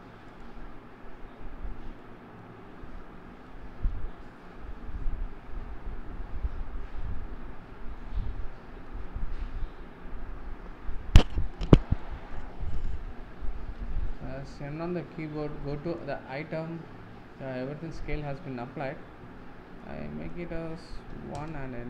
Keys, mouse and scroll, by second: 0.4-12.0 drag, 13.1-14.3 scroll down 1, 14.3 n, 21.4-21.8 drag.